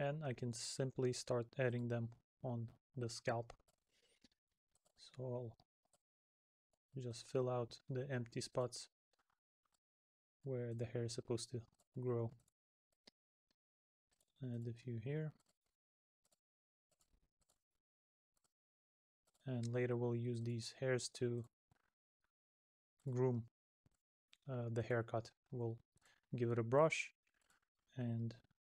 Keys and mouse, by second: 2.1 middle click, 3.9 middle click, 5.0 middle click, 7.3 middle click, 8.8 middle click, 12.6 middle click, 14.9 middle click, 17.7 middle click, 20.8 middle click, 23.3 middle click, 26.3 middle click, 27.8 middle click.